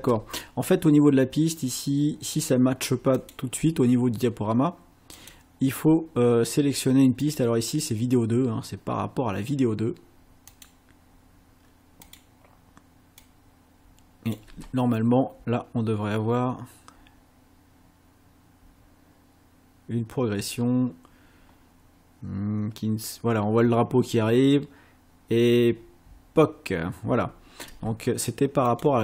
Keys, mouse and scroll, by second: 0.0 space, 3.2 click, 5.2 click, 7.3 click, 10.6 click, 12.1 click, 13.3-14.5 drag, 14.5 space, 27.7 space, 28.7 click.